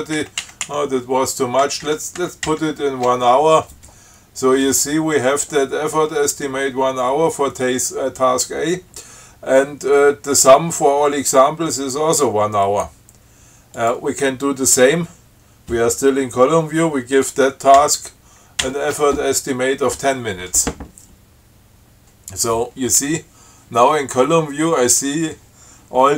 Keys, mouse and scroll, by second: 0.5 shift+Left, 1.9 shift+Right, 14.0 click, 18.1 shift+Right, 18.9 shift+Right.